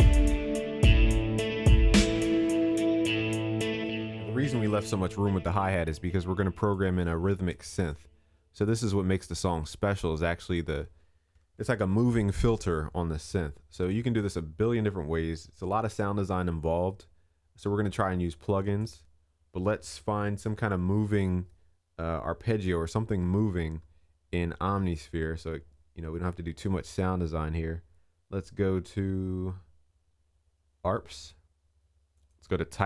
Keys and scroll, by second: 4.3 ctrl+s, 11.4 ctrl+s.